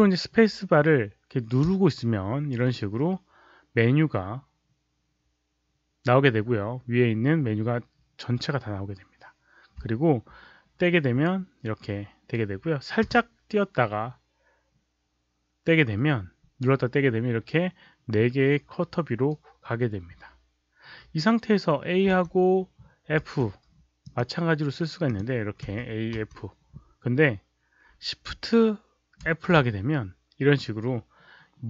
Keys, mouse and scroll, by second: 1.6 space, 13.1 space, 22.0 a, 23.1 f, 23.9 click, 25.0 click, 25.6 f, 29.2 shift+f.